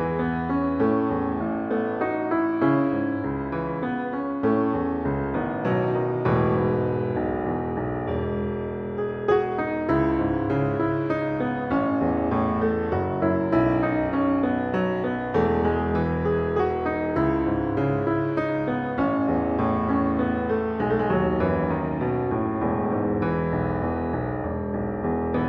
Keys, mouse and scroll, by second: 13.9 alt+/.